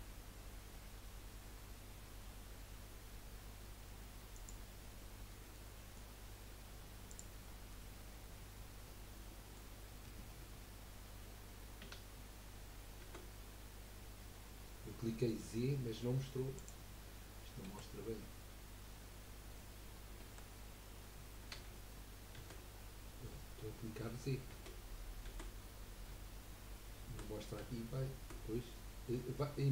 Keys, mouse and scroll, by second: 4.3 click, 5.7-7.1 middle drag, 7.1 click, 7.7-10.8 middle drag, 13.3 g, 17.7 KP_1, 19.1 KP_2, 20.3 KP_1, 21.5 g.